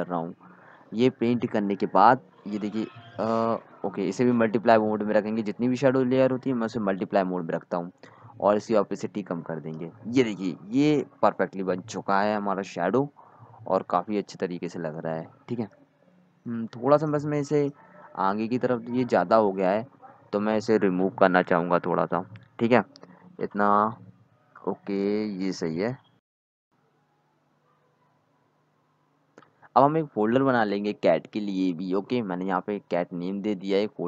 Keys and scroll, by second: 19.8 d, 22.6 d, 33.1-34.0 typing.